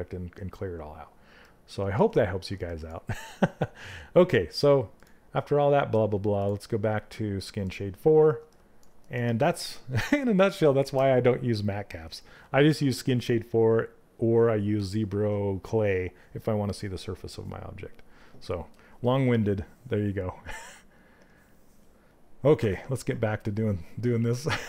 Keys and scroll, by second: 22.1 f.